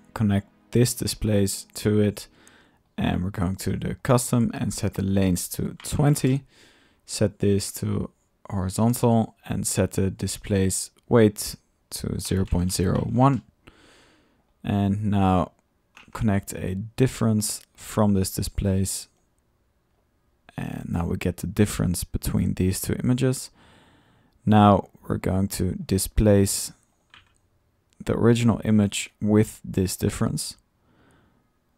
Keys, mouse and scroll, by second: 0.3-1.1 typing, 1.8 click, 2.2-3.9 drag, 4.1-5.3 drag, 7.6 drag, 8.5 click, 10.6-11.3 drag, 14.3-14.7 drag, 15.2-17.1 drag, 17.5-18.3 drag, 19.1-20.0 drag, 20.3-20.8 middle drag, 20.6-21.3 typing, 23.2-24.1 drag, 24.2 click, 25.2 click, 25.4-27.1 typing, 25.8 drag, 26.5 click, 26.7 click, 27.0-27.3 drag, 28.2 drag, 29.3 click, 30.0 click, 31.0-31.7 drag.